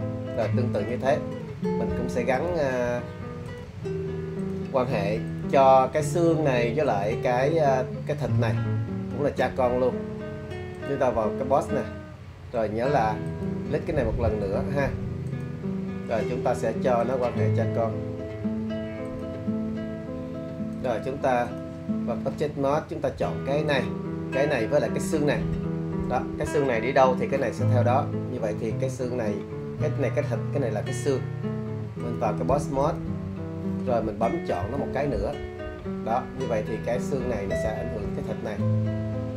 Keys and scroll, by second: 0.1 super+z.